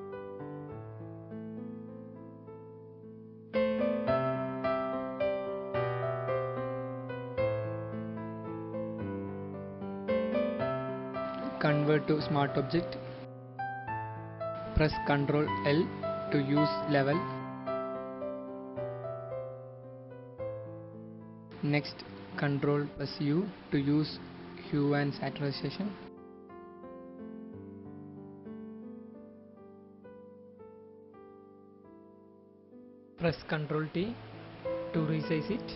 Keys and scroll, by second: 14.1 ctrl+i, 22.1 ctrl+u, 31.7 ctrl+t.